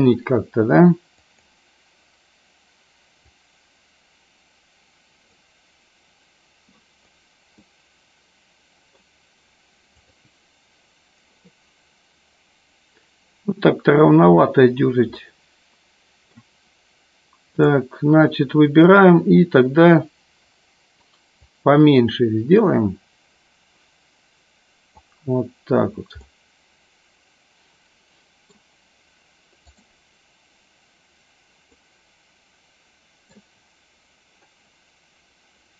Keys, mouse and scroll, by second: 1.2 click, 3.3-5.8 drag, 8.1-9.3 middle drag, 10.1 click, 15.5-17.0 middle drag, 17.7 click, 21.4-25.1 drag, 26.6-29.1 middle drag, 31.8-33.7 middle drag.